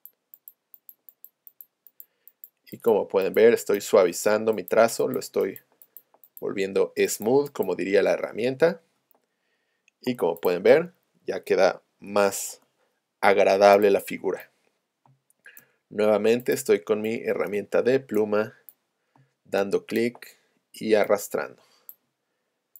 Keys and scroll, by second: 10.1 v, 12.1 a, 15.1 space, 19.3 space.